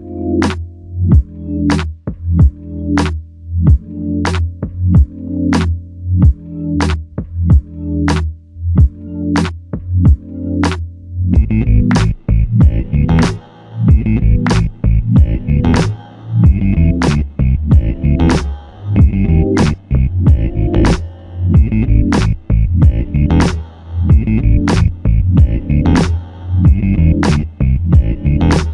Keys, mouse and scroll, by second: 1.5 alt+click, 5.2 alt+m, 7.1 r, 16.4 alt+shift+click, 17.0 alt+click, 20.6 ctrl+click, 22.5 shift+click, 24.4 alt+click, 26.7 shift+click, 28.4 shift+click.